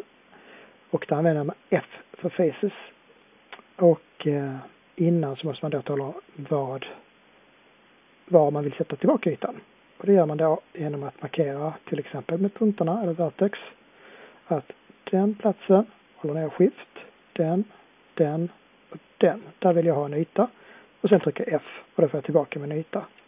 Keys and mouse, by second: 17.1-18.3 drag, 21.0-22.8 middle drag, 21.0 f.